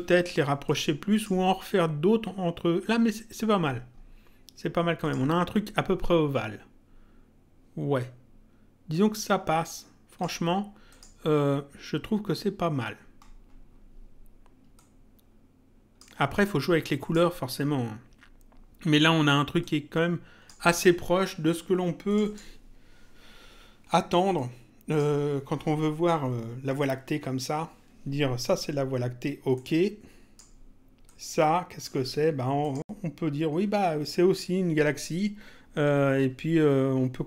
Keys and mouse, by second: 0.7 click, 5.0 click, 8.9 click, 10.9 click, 14.8 click, 16.9 click, 19.6 click, 22.1 click, 24.3 click, 29.5 click, 31.1 click, 32.6 click.